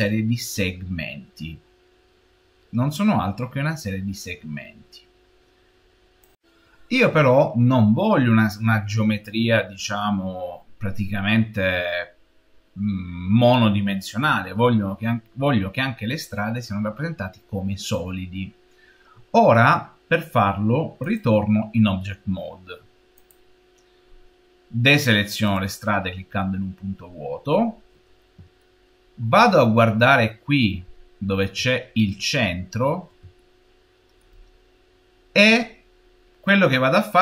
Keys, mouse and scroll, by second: 2.7 scroll down 1, 23.2 click, 23.9-24.3 scroll down 3, 25.3-27.2 drag, 27.2-28.5 scroll down 3, 28.5-29.7 shift+middle drag, 29.7-31.5 scroll up 10, 31.5 shift+middle click, 32.1 scroll up 3, 33.2-36.2 shift+middle drag.